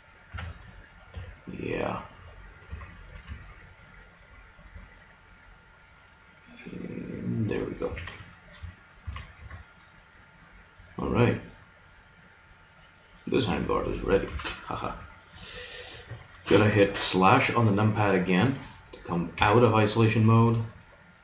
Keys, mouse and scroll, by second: 0.3 a, 1.1 b, 2.7 g, 7.9 a, 8.7-10.7 drag, 9.0 z, 9.5 Tab, 11.8 middle click, 12.5 middle click, 14.3 KP_3, 19.3 KP_Divide, 20.1-21.2 middle drag.